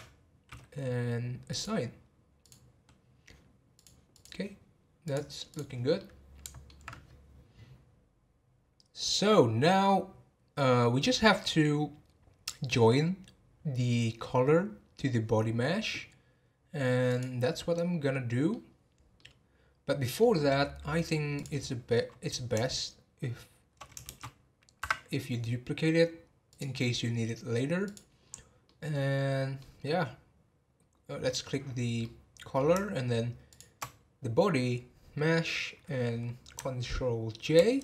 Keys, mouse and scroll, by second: 1.5 click, 3.7 click, 5.0 click, 6.0-7.9 middle drag, 16.0-17.0 scroll down 1, 17.0 click, 17.7-20.6 middle drag, 20.6 scroll down 2, 21.3 click, 24.1 shift+d, 26.5 click, 27.8 click, 28.3-28.6 scroll down 4, 28.6-29.8 middle drag, 29.8 scroll up 1, 31.2 middle click, 31.4 scroll up 1, 32.0-33.5 middle drag, 33.5 shift+click.